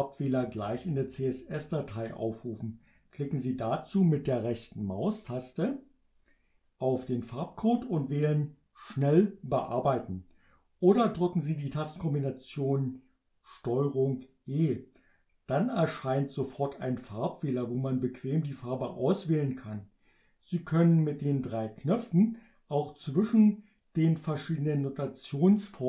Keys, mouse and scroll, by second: 7.2 right click, 14.2 click.